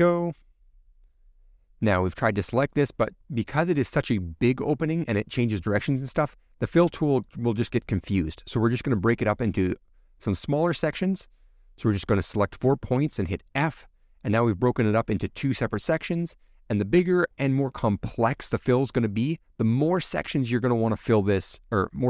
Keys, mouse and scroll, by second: 0.1 scroll down 1, 0.2 middle click, 0.7 click, 1.5 middle click, 2.2 shift+middle click, 3.0 alt+shift+click, 3.5 alt+shift+click, 3.9 alt+shift+click, 4.2 shift+click, 4.8-6.3 middle drag, 6.3 click, 6.4 scroll up 1, 6.4 middle click, 6.5 scroll down 2, 6.6 middle click, 6.9 scroll up 1, 7.0-8.0 shift+middle drag, 8.0 click, 8.9 shift+click, 9.2 middle click, 10.0-10.4 scroll up 2, 12.1-13.8 middle drag, 13.8 f, 16.1-17.9 middle drag, 17.9 click, 19.8 alt+shift+click, 21.4 middle click, 21.7 scroll down 1, 21.8-22.0 shift+middle drag.